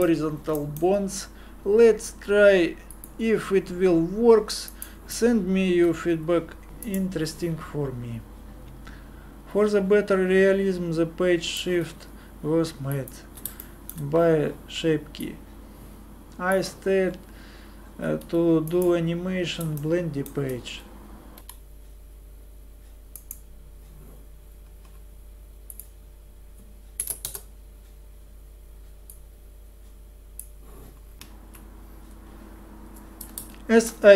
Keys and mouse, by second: 5.8 r, 7.1-9.0 middle drag, 9.3-12.1 drag, 13.6-17.1 middle drag, 18.2 z, 18.7 click, 21.5 g, 24.6-31.1 drag, 31.1 super+Pause.